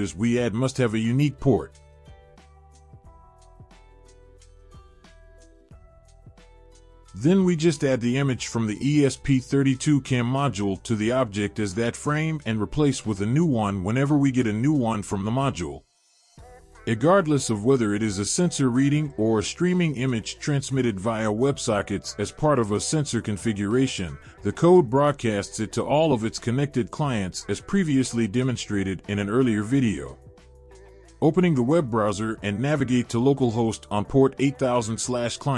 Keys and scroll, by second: 13.3 ctrl+v.